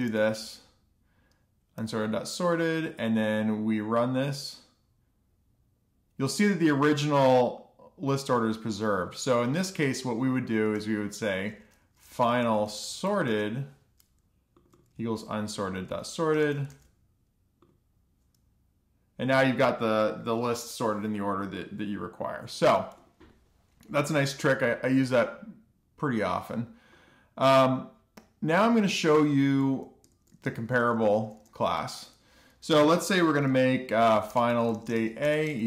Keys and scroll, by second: 0.0-0.6 typing, 1.6 alt+shift+f, 2.0 super+s, 12.9-15.1 typing, 16.5 super+c, 17.4 super+v, 17.8 alt+shift+f, 18.1 super+s, 30.8 Return, 31.0 Return, 31.3-32.7 typing, 33.0 Return, 35.0-35.6 typing.